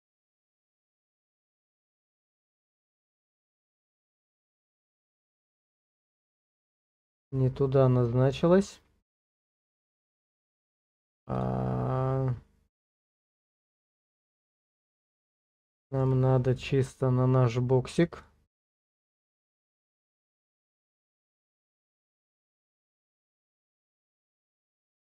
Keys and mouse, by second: 4.5-5.7 shift+middle drag, 11.3 click, 12.9-13.9 drag, 14.8 shift+middle click, 15.8 shift+middle click, 18.4 click, 20.2 click, 21.5 click, 23.5 click.